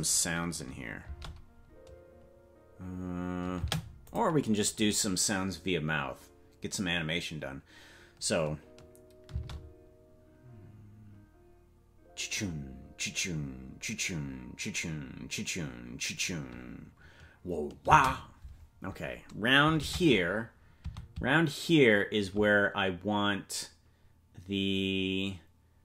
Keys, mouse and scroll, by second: 1.0 space, 4.0 click, 4.0 space, 9.3 space, 17.8 space, 19.7 shift+`.